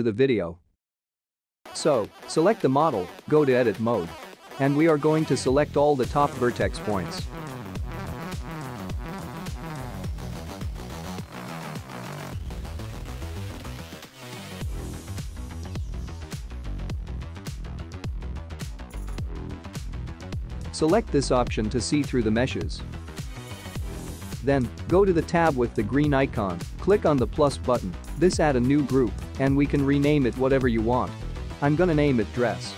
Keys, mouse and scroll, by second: 5.4 Tab, 7.3 middle click, 14.1 click, 16.0-16.3 scroll up 2, 16.6 shift+middle click, 17.6 click, 20.9 click, 21.8 click, 22.3 click, 25.7 click, 28.2 click, 30.1 click, 30.2 click.